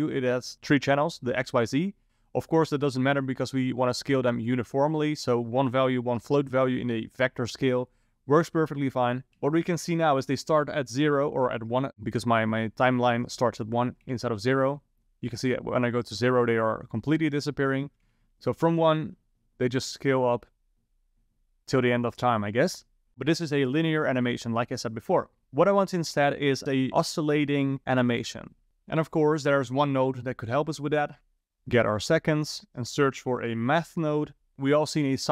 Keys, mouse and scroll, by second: 9.4 shift+Left, 14.1 Left, 18.1 shift+Left, 19.0 space, 31.5 click, 32.2 click, 34.5 click.